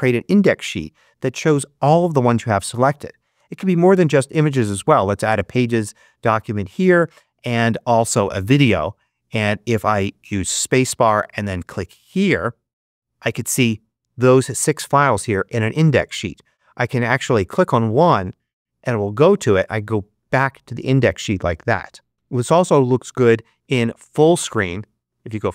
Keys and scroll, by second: 3.2 space, 10.5 space.